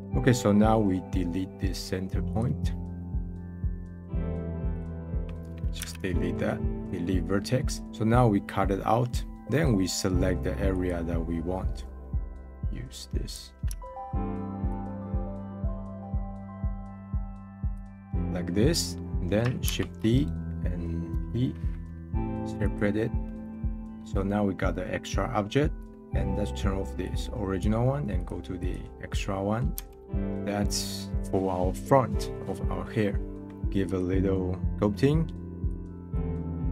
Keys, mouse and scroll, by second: 0.0 middle click, 0.3-0.7 scroll up 1, 2.3 click, 3.5 scroll up 1, 3.8 middle click, 4.7-5.8 drag, 5.8 x, 7.3-8.7 middle drag, 8.7 scroll down 2, 9.1-10.7 middle drag, 10.7 click, 11.5 scroll up 3, 12.1-17.7 drag, 18.1-19.6 middle drag, 19.6 shift+d, 21.1 p, 23.2-27.0 middle drag, 27.0-29.1 drag, 29.1 middle click, 29.7 Tab, 30.2 middle click, 31.1 scroll down 1, 33.6 click, 35.3-36.7 drag.